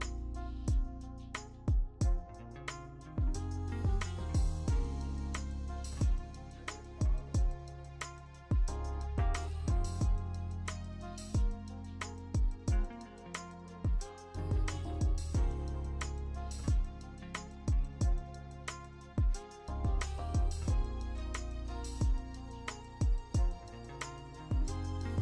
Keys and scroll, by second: 12.5 ctrl+alt+shift+e, 13.1 ctrl+alt+shift+e, 13.5 v, 13.6 ctrl+alt+shift+e, 15.1 ctrl+d, 20.8 ctrl+z, 21.8 ctrl+z.